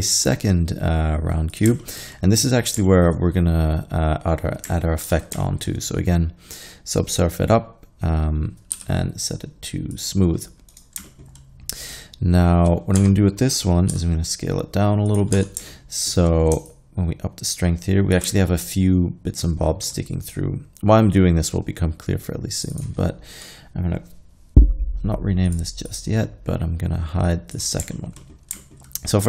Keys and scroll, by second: 5.1 ctrl+3, 8.8 t, 13.0 Tab, 13.9 s, 15.4 Tab.